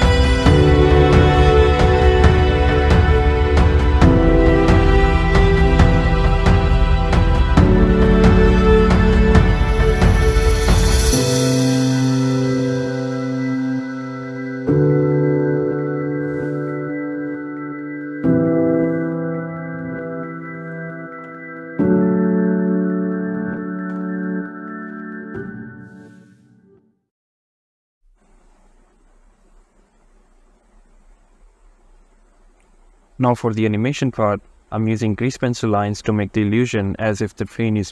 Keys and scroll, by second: 7.2 a, 26.8 g, 27.2 x, 31.3 shift+a, 33.4 g.